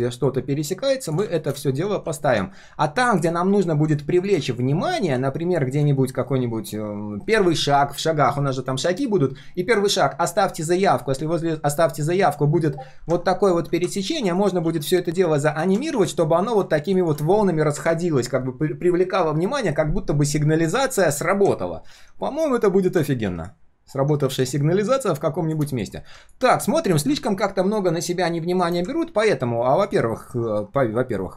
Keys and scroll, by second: 14.6 ctrl+d, 20.7 ctrl+z, 21.9 ctrl+z, 23.3 ctrl+z.